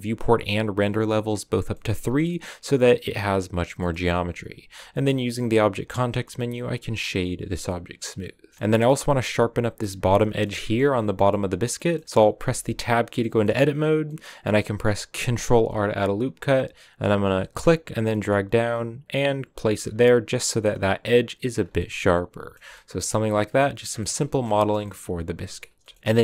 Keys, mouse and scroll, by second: 1.6 middle click, 1.9 scroll up 3, 2.1 middle click, 2.9-3.3 scroll down 2, 3.7 middle click, 4.7 w, 7.4 scroll down 1, 7.6 middle click, 8.5 scroll up 1, 8.6-12.6 middle drag, 12.6 Tab, 13.1-15.2 middle drag, 15.2 ctrl+r, 19.7 scroll up 1, 19.7 middle click, 20.4 Tab, 20.8-21.3 scroll down 1, 21.3-21.7 scroll down 1, 21.7 middle click, 22.5 a, 22.6-24.1 middle drag, 24.1 scroll up 3, 24.2-26.0 shift+middle drag, 26.0 shift+a.